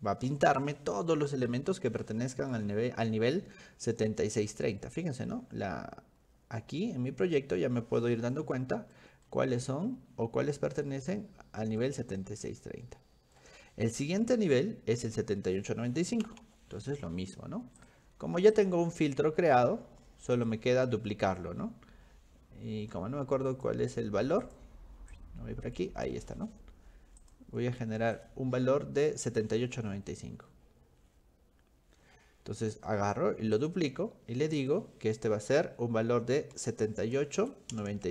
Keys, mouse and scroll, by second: 5.3-5.7 scroll up 2, 6.2-6.8 scroll up 6, 6.5 middle click, 6.7 middle click, 6.9 middle click, 7.3 middle click, 8.4 middle click, 9.3-10.8 middle drag, 11.2 middle click, 12.1-13.4 middle drag, 17.8 click, 18.5 click, 20.4 click, 23.5 click, 24.4 click, 25.1 click, 27.2 click, 28.2 click, 32.6 click, 33.6 click, 34.6 click.